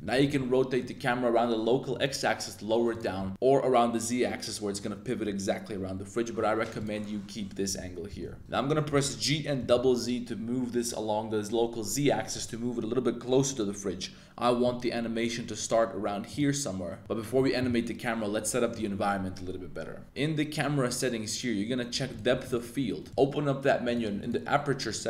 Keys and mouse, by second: 0.1 x, 0.2 x, 3.3 r, 6.8 click, 8.1-9.7 typing, 22.1-23.2 drag, 23.8 click, 24.1 click.